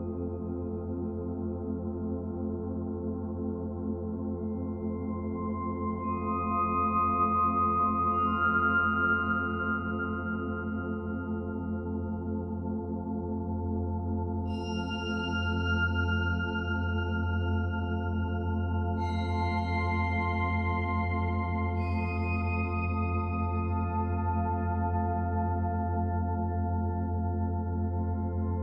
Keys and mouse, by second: 0.5 click, 1.5-2.9 alt+drag, 3.2 1, 4.2 Tab, 6.5 click, 7.9 alt+a, 8.7 ctrl+alt+click, 9.8-10.9 alt+drag, 11.4-14.5 alt+drag, 11.4 1, 15.0-16.0 typing, 16.2-20.3 drag, 20.1-20.8 typing, 21.6 Tab, 22.6-23.9 drag, 23.9 alt+a, 24.3 b, 24.6-28.2 alt+drag, 28.2 Delete.